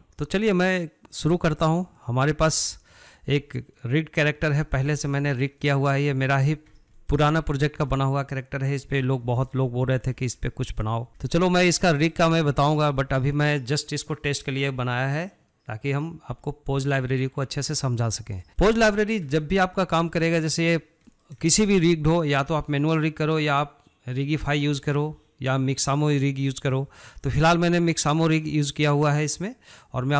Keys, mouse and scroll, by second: 3.4 scroll down 2, 3.8-4.7 middle drag, 4.7-5.2 scroll up 5, 5.2-6.4 shift+middle drag, 6.4 click, 6.7 scroll down 1, 7.0-9.2 shift+middle drag, 9.2 scroll down 1, 9.4-30.1 shift+middle drag.